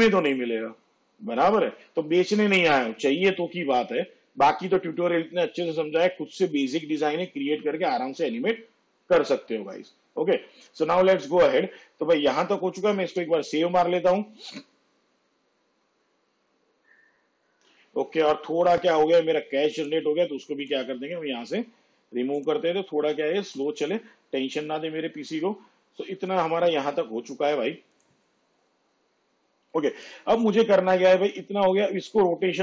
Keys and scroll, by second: 13.1 ctrl+s.